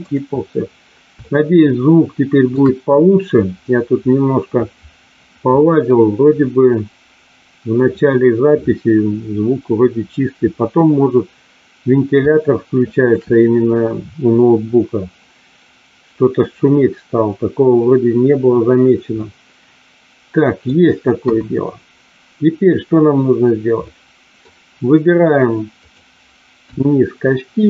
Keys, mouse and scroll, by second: 1.2-2.6 shift+middle drag, 12.3 shift+middle click, 19.1-20.7 middle drag, 21.2 KP_1, 23.7 middle click, 25.7 click, 26.6 KP_1.